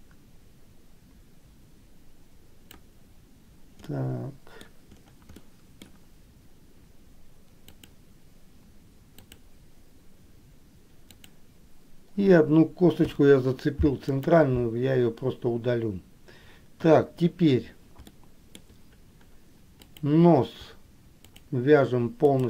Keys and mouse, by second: 4.1 middle click, 5.6 middle click, 8.0 click, 9.3 click, 11.3 click, 13.3 Delete, 17.0 KP_1, 18.3 shift+middle click, 20.0 click.